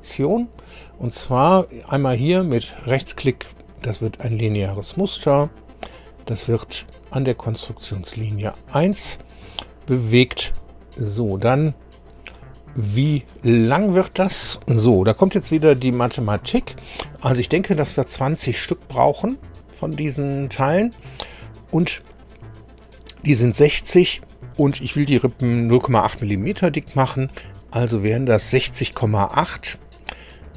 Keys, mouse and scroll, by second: 2.8 right click, 4.5 click, 5.9 click, 7.2 click, 10.5 shift+middle click, 11.2 shift+click, 12.1 click.